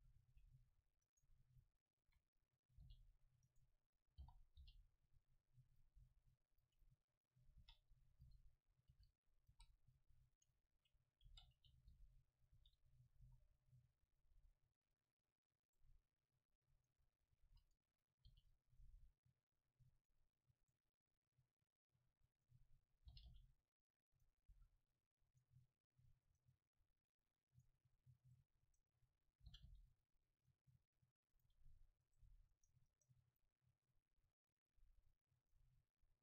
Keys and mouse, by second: 0.0 a, 0.3 c, 0.5 click, 1.9-3.5 middle drag, 2.9 g, 4.3 o, 4.6 g, 6.0 s, 6.6-8.5 drag, 7.7 e, 8.3 g, 8.9-11.0 drag, 8.9 r, 9.5 s, 11.2 click, 11.3 e, 11.5 click, 11.9 g, 12.6-15.9 drag, 12.6 r, 13.2 s, 17.5 a, 18.3 ctrl+r, 20.1-21.5 drag, 20.6 right click, 22.5-24.2 drag, 23.1 g, 24.3-29.4 drag, 24.6 a, 26.3-30.4 right drag, 29.5 g, 30.5-33.3 drag.